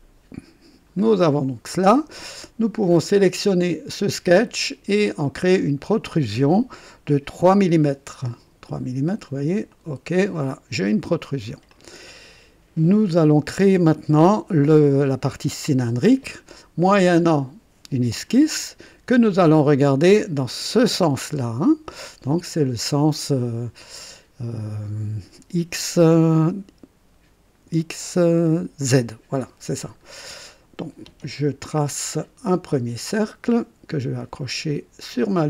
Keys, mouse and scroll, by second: 1.0-1.3 scroll down 1, 1.6 right click, 3.2 click, 5.3 click, 7.3 KP_3, 9.7 click, 10.4-11.6 drag, 11.7 click, 18.2 click, 20.6 click, 29.8-30.2 scroll up 1, 30.4 right click, 33.2 click.